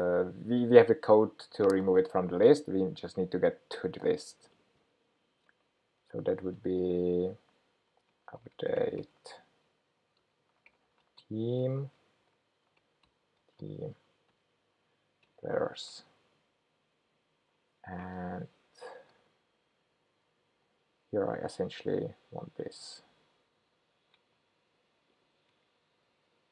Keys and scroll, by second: 15.4 Return, 23.7 ctrl+k.